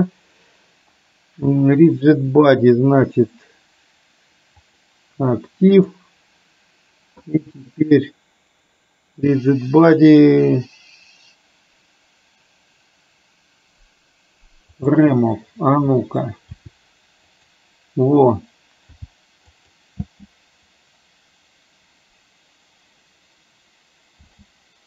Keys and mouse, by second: 5.9-15.1 drag, 16.6 r, 19.0 g, 20.1 space, 24.3 space.